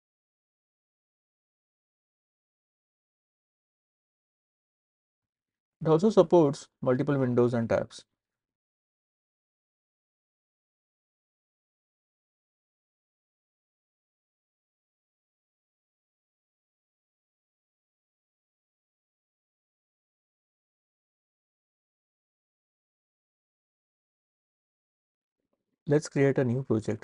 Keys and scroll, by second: 6.5 shift+super+n, 12.3 super+t, 22.0 super+w, 22.7 super+w.